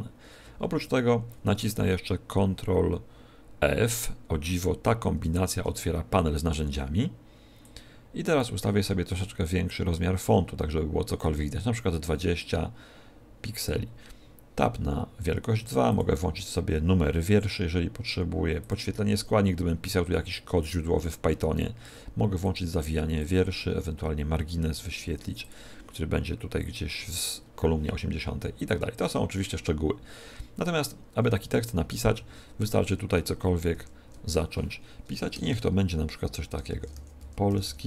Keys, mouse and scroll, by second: 5.1 ctrl+f, 7.5 click, 12.3 click, 15.8 click, 18.5 click, 22.3 click, 23.1 click, 24.1-24.5 scroll down 3, 25.1 scroll down 1, 25.3 click, 28.9 click, 32.1 ctrl+f, 33.7 ctrl+f, 35.3 Return, 36.6-37.8 typing.